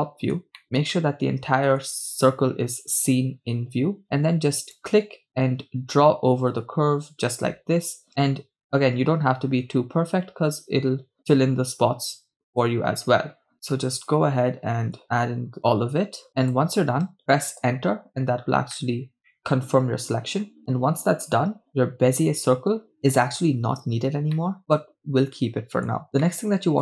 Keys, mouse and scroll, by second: 0.6 scroll down 1, 1.0-1.8 shift+middle drag, 18.8-19.2 middle drag, 19.2 scroll up 2, 19.3 shift+middle click, 24.5-25.9 middle drag, 26.2 right click, 26.2 scroll down 2.